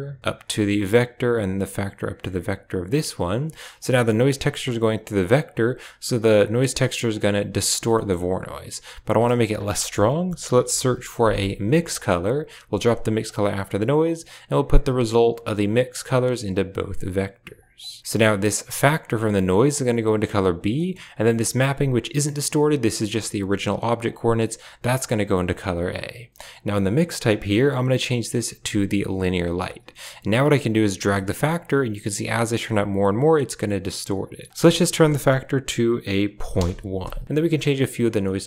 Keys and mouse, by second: 1.4-2.0 drag, 2.6-3.3 drag, 3.7 click, 4.4 middle click, 5.1-6.9 drag, 7.8 middle click, 9.4 shift+a, 13.1 click, 14.1-15.2 drag, 15.6 click, 16.8-17.5 drag, 18.3 click, 18.4 click, 19.6-20.4 drag, 20.6 middle click, 21.3 click, 21.7-22.7 drag, 23.9-25.0 drag, 25.3 click, 26.8-29.1 drag, 30.3-34.2 drag, 34.5-36.5 drag, 37.5 click, 38.1 middle click.